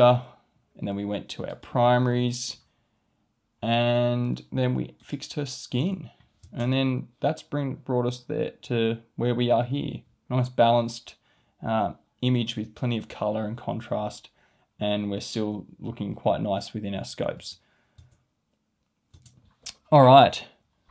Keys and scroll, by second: 6.4 space, 17.3 space.